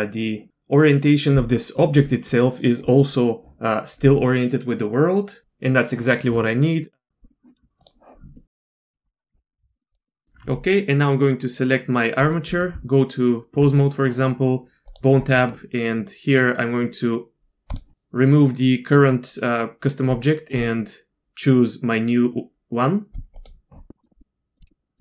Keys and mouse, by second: 7.1 z, 7.2 middle click, 8.8 middle click, 9.8 middle click, 9.9 drag, 10.1 click, 12.7 Tab, 14.9 click, 17.7 click, 23.9 click, 24.2-24.5 drag, 24.7 middle drag.